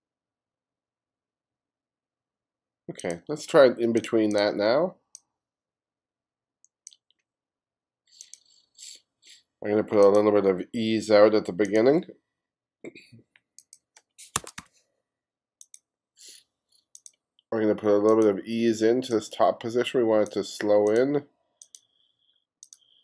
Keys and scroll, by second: 14.2-15.1 typing.